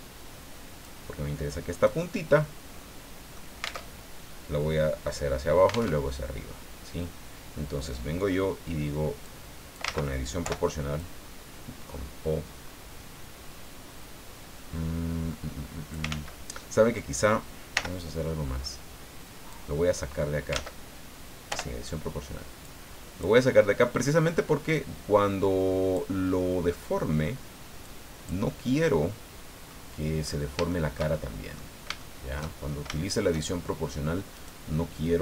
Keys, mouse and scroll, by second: 1.7 right click, 2.4-3.5 middle drag, 3.8 alt+Tab, 5.9 alt+Tab, 9.2 click, 9.9 ctrl+z, 10.4 o, 11.0 click, 11.9-12.2 scroll up 2, 12.5-13.0 scroll up 2, 16.1 ctrl+z, 17.7 l, 18.2 middle click, 19.5-20.7 drag, 20.7 ctrl+z, 21.5 o, 22.6 click, 23.5 scroll down 2, 24.7-26.1 drag, 27.8 click, 28.6 scroll down 1, 28.9 middle click, 30.2-30.6 scroll up 1, 30.7-31.7 shift+middle drag, 32.0 shift+middle click, 32.9 shift+middle click, 34.3 right click, 34.7-35.2 middle drag.